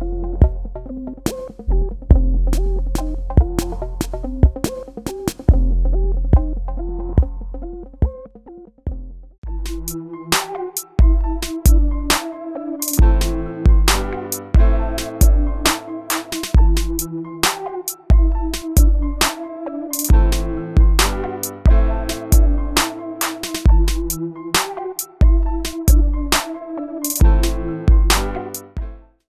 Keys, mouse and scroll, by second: 4.1 click.